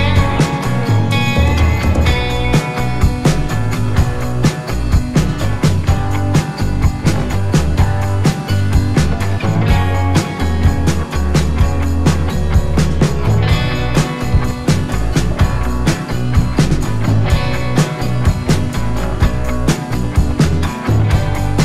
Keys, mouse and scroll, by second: 4.1 click, 14.9 alt+Num_Lock, 15.1 alt+scroll down 1, 15.7-16.2 scroll down 1, 16.2 click, 21.2 Up.